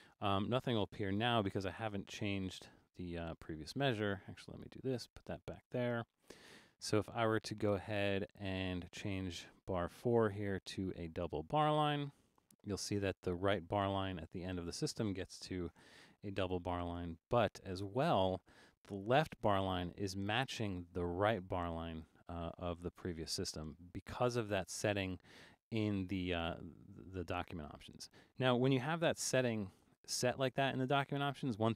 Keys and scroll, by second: 2.2 super+-, 3.3 super+-, 4.1 Escape, 5.0 Up, 9.9 Return, 15.9 super+=, 16.3 super+=, 29.0 super+-, 29.7 super+-.